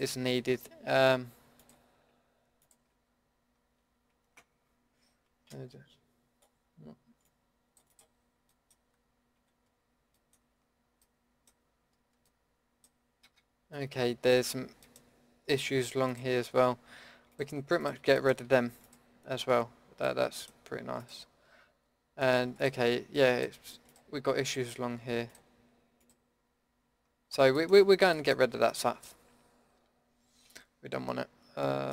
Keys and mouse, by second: 1.6-5.5 drag, 5.5 c, 8.0-9.3 drag, 9.3 KP_Decimal, 12.9 middle click, 13.3 a, 13.8 middle click, 14.2 middle click, 27.3 middle click, 28.8-31.9 drag.